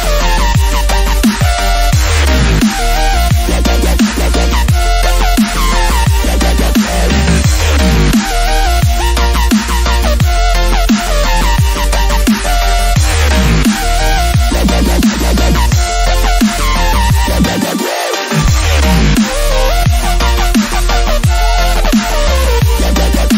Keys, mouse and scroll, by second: 0.0 click, 1.4 scroll up 1, 1.5-3.9 drag, 4.1-4.5 scroll down 1, 4.5-7.4 drag, 7.4-8.7 drag, 8.8-9.6 scroll down 1, 10.4-11.0 scroll up 1, 11.0 click, 12.6 click, 15.3 click, 17.7 click, 19.4 alt+scroll up 1, 20.1 scroll up 1, 22.0-23.3 drag.